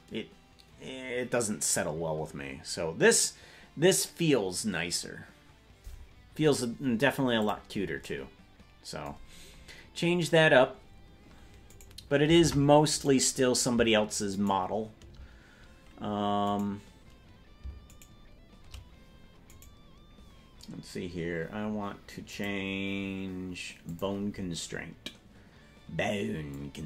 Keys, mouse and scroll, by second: 9.2 scroll down 3, 9.3 scroll down 4, 9.3 scroll up 3, 9.4 scroll down 1, 9.5-10.1 scroll down 3, 10.1-11.8 scroll down 1, 11.8 right click, 12.4 ctrl+Tab, 13.2 right click, 14.6 shift+right click, 16.8 right click, 18.2 shift+right click, 19.8 right click, 22.3 click, 23.8 click, 26.5-26.8 drag.